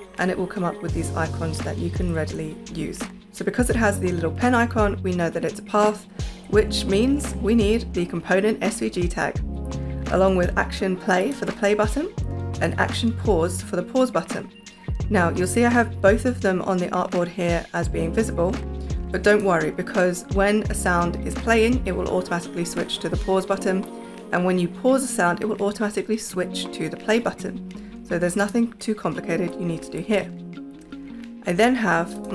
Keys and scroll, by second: 1.9 super+y.